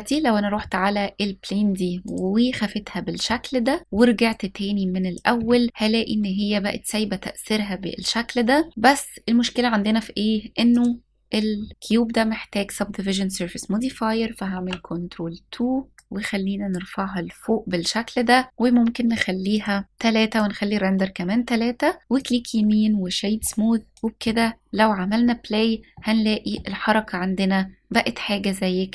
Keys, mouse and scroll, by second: 1.7 click, 3.5 middle drag, 4.0 click, 5.0 space, 8.7 space, 8.9 scroll up 1, 10.4 click, 10.4 scroll up 1, 14.2 ctrl+2, 15.9-16.3 drag, 19.2 click, 19.9 click, 21.7 right click, 23.9 click, 23.9 space, 25.6-26.2 middle drag.